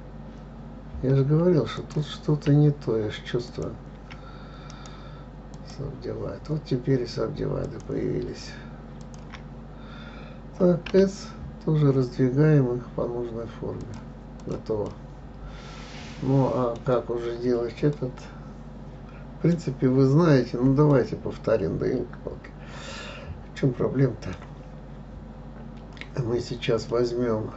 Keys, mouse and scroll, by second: 0.0-2.2 scroll up 1, 2.2 click, 3.9 shift+click, 5.1 right click, 6.1-8.0 right drag, 8.0 click, 9.4 shift+click, 9.9-11.3 scroll down 2, 11.3 s, 14.8 click, 15.3-17.3 middle drag, 17.3-18.0 scroll down 6, 18.3-24.4 middle drag, 27.3-27.5 middle drag.